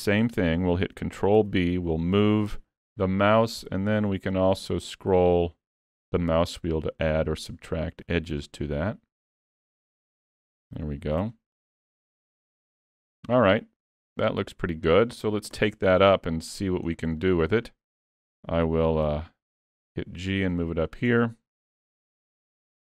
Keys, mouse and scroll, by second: 0.1 shift+middle click, 1.4 ctrl+b, 11.3 alt+a, 11.5 Tab, 11.9-12.4 scroll down 3, 12.2 middle click, 15.6 KP_3, 16.5-17.2 scroll down 9, 17.2 shift+middle click, 17.7 scroll up 3, 18.1 shift+middle click, 19.0 g, 21.0 scroll up 2, 21.3 shift+middle click, 22.1 KP_Decimal.